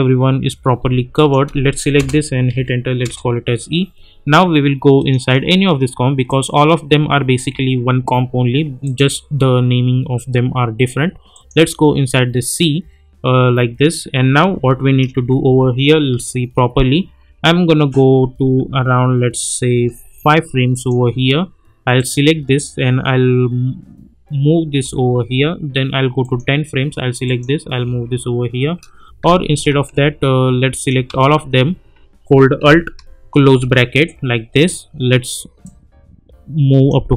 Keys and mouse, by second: 1.9 Return, 2.5 e, 3.0 Return, 5.0 click, 8.8 click, 11.5 click, 15.1-16.1 typing, 17.2 typing, 18.4 typing, 19.7 typing, 20.7 click, 24.8 [, 26.2 click, 27.8 [, 29.4 ctrl+z, 30.7 click, 31.0 ctrl+a, 33.5 alt+], 35.6-37.1 drag.